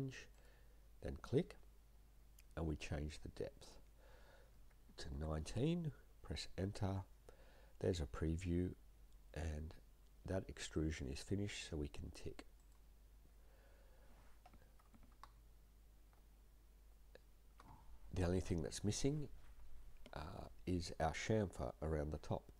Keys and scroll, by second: 4.9 typing, 6.2 Return.